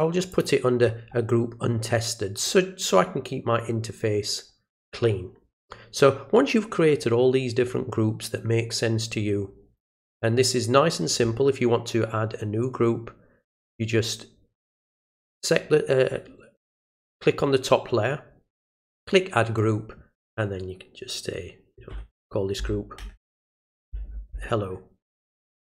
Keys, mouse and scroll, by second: 0.3 click, 1.2 middle click, 2.4 click, 14.7 click, 18.9 click.